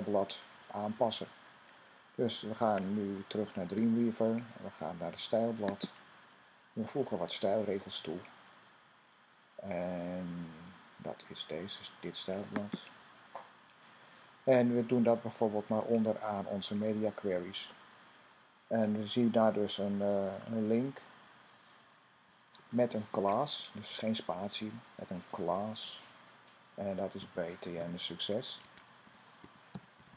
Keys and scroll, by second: 22.0 typing, 25.3 typing, 26.8-30.1 typing.